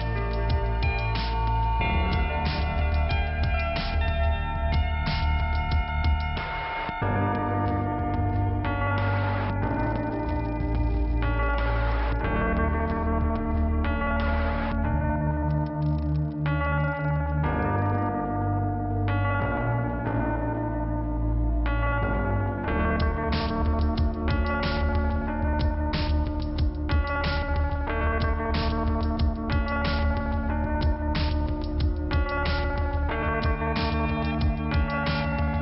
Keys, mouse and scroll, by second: 5.3 click, 14.0 click, 16.9 middle click, 18.7 click, 20.0 click, 22.1 click, 23.2 click, 25.0 click, 26.3 click, 27.7 click, 28.7 click, 29.3 click, 30.5 click, 31.8 click, 33.1 click, 34.6 click.